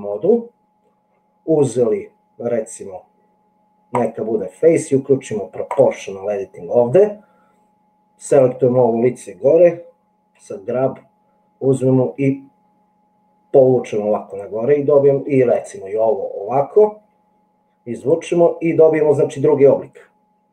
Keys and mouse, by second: 4.0 click, 10.4 g, 17.0 g.